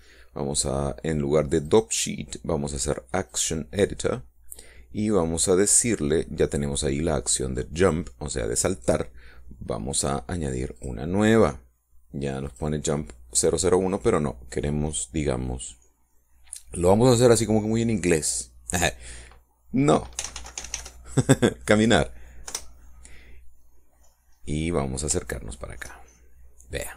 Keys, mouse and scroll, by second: 2.4 click, 4.1 click, 6.8 middle click, 11.6 click, 13.3 click, 21.0 c, 21.2 m, 21.4 n, 21.6 r, 23.3 Return, 25.2 middle click, 26.1 shift+middle click.